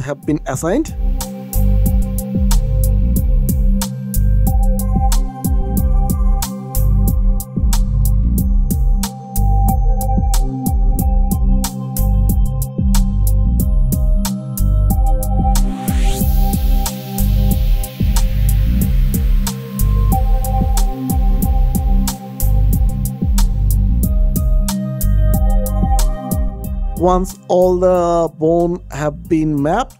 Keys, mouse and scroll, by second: 0.6 click, 1.7 click, 2.9 click, 3.7 click, 5.0-5.5 scroll down 1, 6.5 click, 7.2 click, 8.0 click, 8.5-9.0 scroll down 1, 9.0 scroll up 1, 10.0-10.5 scroll down 1, 10.6 click, 11.4 click, 12.5 scroll up 1, 12.6 click, 14.3 click, 15.2 click, 16.8 click, 17.8 click, 18.6 click, 19.6 click, 20.3 click, 21.0 click, 22.6 click, 23.8 click, 25.1 click, 25.7 click, 28.4 click.